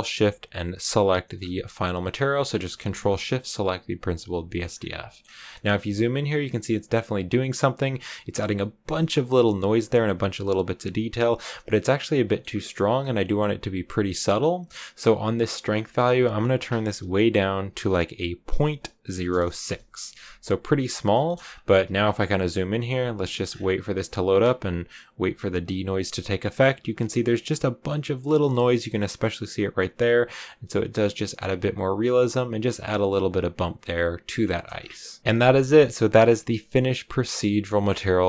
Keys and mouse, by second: 0.9 ctrl+shift+click, 1.8 click, 4.3 shift+middle click, 4.9 shift+middle click, 12.2 click, 15.6-20.2 drag, 21.0 shift+click, 21.7 ctrl+b, 23.2 shift+click, 35.2 ctrl+w.